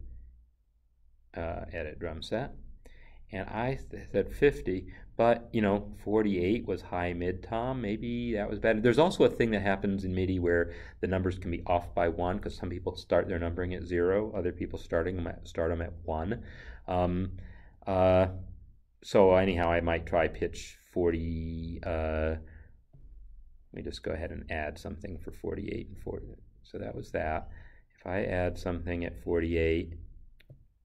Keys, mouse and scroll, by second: 2.2 click, 4.7 click.